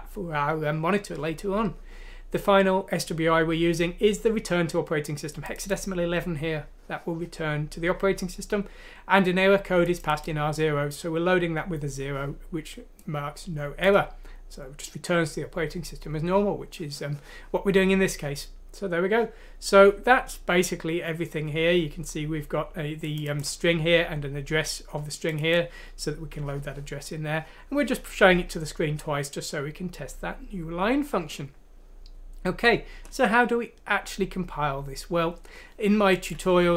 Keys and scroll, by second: 36.6 F6.